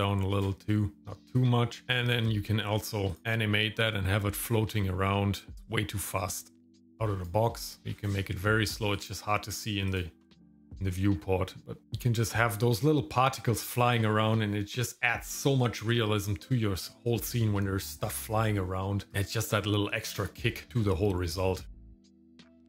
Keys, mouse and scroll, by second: 1.8 scroll down 4, 3.1 click, 5.5-7.3 drag, 8.9 click, 10.2 click, 11.8 click, 19.2 click.